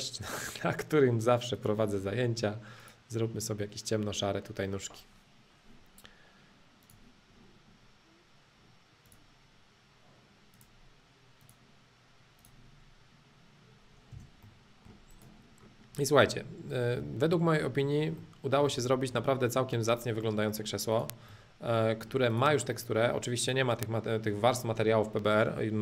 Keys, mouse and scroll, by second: 0.9-1.6 scroll down 1, 1.6 click, 2.0 middle click, 2.8-4.8 drag, 6.8 click, 7.5-9.1 middle drag, 9.1-11.1 drag, 11.4-13.4 drag, 14.1 space, 14.4 middle click, 15.1-17.1 drag, 18.2 middle click, 18.9-19.9 shift+middle drag, 19.9 click, 20.2 middle click, 20.9 click, 21.3-22.3 middle drag, 22.3 click, 22.7 middle click, 23.4 click, 23.8-25.8 middle drag.